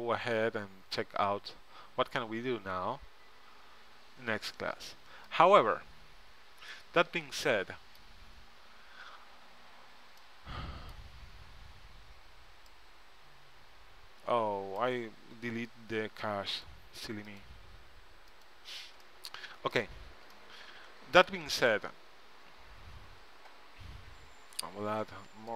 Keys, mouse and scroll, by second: 6.2-8.0 drag, 6.9-7.9 middle drag, 6.9 right click, 9.7 Tab, 11.1 Tab, 12.9-14.8 right drag, 16.7-19.2 drag, 19.2 middle click, 20.1 Tab, 23.1 a.